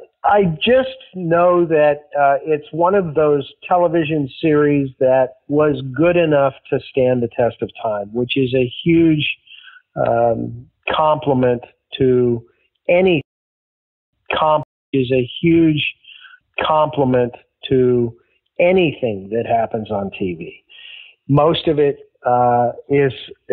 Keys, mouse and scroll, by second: 2.8 click, 4.0-5.0 drag, 12.1-13.1 drag, 13.1 space, 13.8 ctrl+shift+Delete, 14.0 space, 14.5 space, 14.7 click, 14.8 space, 17.2 ctrl+s, 19.2 click, 20.6 click.